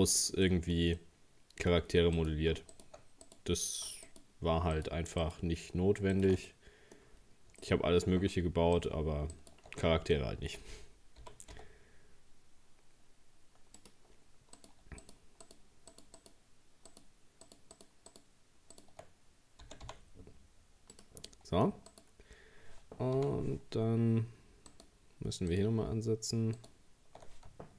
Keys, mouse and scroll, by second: 2.2 right click, 2.7 alt+shift+right click, 3.3 shift+right click, 4.1 alt+shift+right click, 4.8 alt+shift+right click, 5.2 alt+shift+right click, 6.1 alt+shift+right click, 6.5 middle click, 7.2-7.6 scroll up 4, 7.6-8.8 shift+middle drag, 8.8 alt+shift+right click, 9.8-10.2 scroll down 5, 10.2-11.2 middle drag, 11.2 g, 14.6 right click, 15.0 shift+right click, 15.4 shift+right click, 15.9 shift+right click, 16.2 shift+right click, 16.9 shift+right click, 17.5 shift+right click, 17.8 shift+right click, 18.1 shift+right click, 18.8 shift+right click, 19.6 g, 21.3 middle click, 21.9 right click, 23.2 ctrl+z, 24.7 alt+shift+right click, 25.5 alt+shift+right click, 26.6 alt+shift+right click.